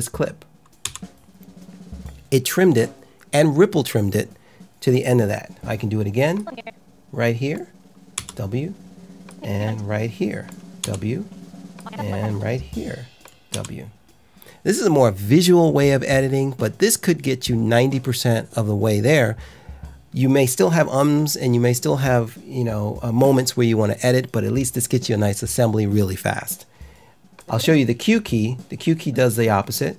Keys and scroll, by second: 0.8 w, 8.1 w, 10.8 w, 13.4 w.